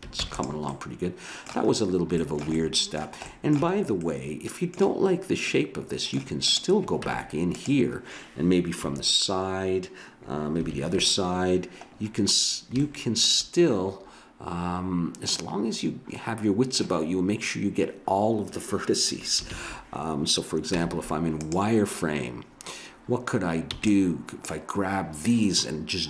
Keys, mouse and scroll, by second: 0.1 ctrl+s, 0.7 middle click, 6.5-7.7 drag, 7.0 Tab, 8.8 KP_3, 10.7 ctrl+KP_3, 19.5 ctrl+KP_3, 20.8 z, 23.7 b.